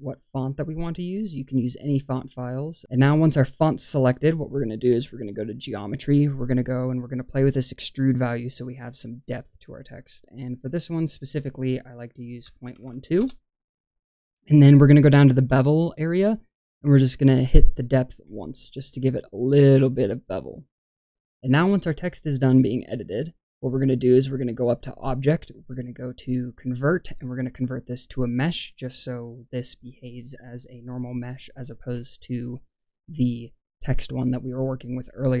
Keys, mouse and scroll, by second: 1.7 shift+middle click, 5.2 click, 6.5-6.9 middle drag, 7.4 middle click, 7.9 middle click, 9.3-13.1 drag, 18.3 click, 20.3-21.6 middle drag, 24.8-28.3 drag, 35.0-35.4 scroll down 1.